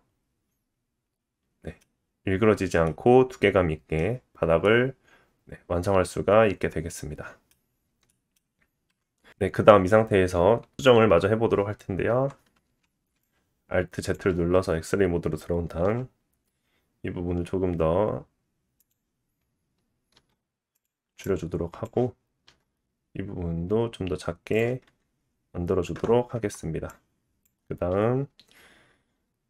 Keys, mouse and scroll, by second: 4.6-8.1 middle drag, 7.7-8.1 scroll down 1, 8.9 KP_1, 9.3 Tab, 12.1 Tab, 12.6 alt+z, 13.2-20.8 drag, 15.8 s, 20.8 middle click, 21.2-24.6 drag, 22.4 s, 24.6-26.9 middle drag, 24.9 Tab, 26.3 Tab, 26.9-29.4 drag.